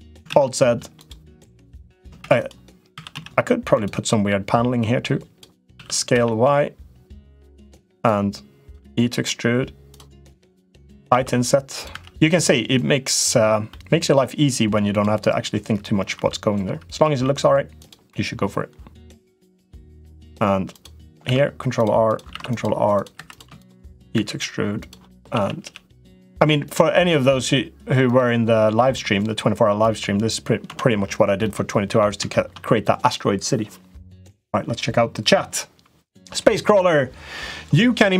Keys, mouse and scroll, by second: 0.0 alt+z, 0.4 middle click, 0.8 click, 1.3 middle click, 2.1 shift+d, 2.7 s, 3.9 middle click, 4.8 click, 5.5 s, 7.9 click, 8.6 e, 10.1 click, 10.9 i, 11.8 e, 13.6 middle click, 14.6 click, 16.0 i, 17.0 e, 19.3 middle click, 20.0 click, 20.5 click, 21.1 ctrl+r, 22.1 ctrl+r, 23.1 click, 23.1 3, 23.4 shift+click, 23.6 shift+click, 24.0 e, 25.1 a, 25.4 g, 30.5 Tab, 31.2 middle click, 32.1 shift+middle click.